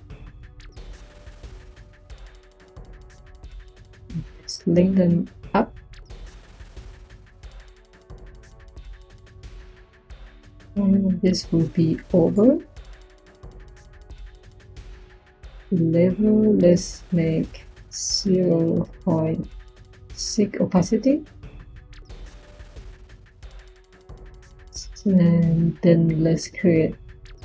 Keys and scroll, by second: 18.0-19.9 typing, 26.2 Tab.